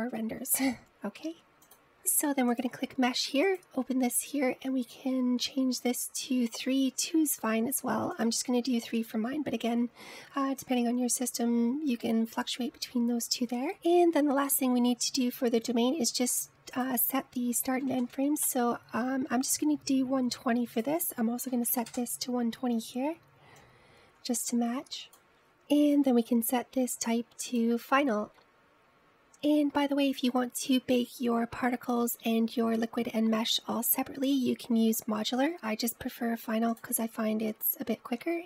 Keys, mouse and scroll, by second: 1.9 click, 2.3-3.0 scroll down 10, 3.7 click, 4.6-7.6 drag, 9.3-11.3 drag, 11.3-13.6 scroll down 4, 14.8-17.8 scroll down 8, 17.8-20.7 drag, 21.9-25.4 drag, 26.9-31.5 drag.